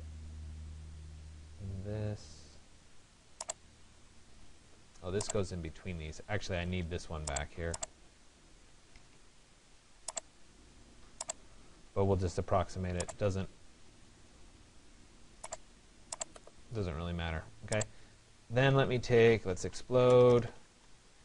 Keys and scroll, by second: 4.0 Delete, 20.2 e.